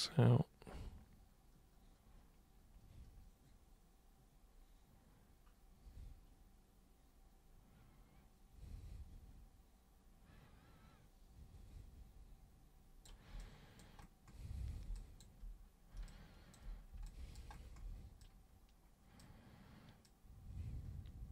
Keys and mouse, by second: 13.4 alt+super+click, 14.9 alt+super+click, 15.9 super+b, 16.1 click, 17.0 alt+super+click, 18.2 super+click, 20.0-21.3 super+drag.